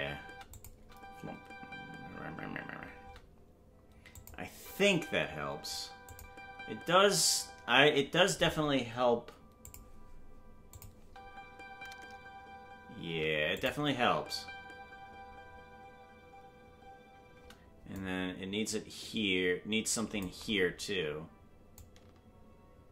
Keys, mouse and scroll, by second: 0.5 click, 0.5 space, 0.7 space, 4.1 click, 4.5 space, 6.1 click, 7.8 space, 9.6 click, 10.7 click, 11.0 space, 13.6 click, 13.6 space, 13.8 space, 17.9-20.2 drag, 17.9 space, 21.7-22.9 drag.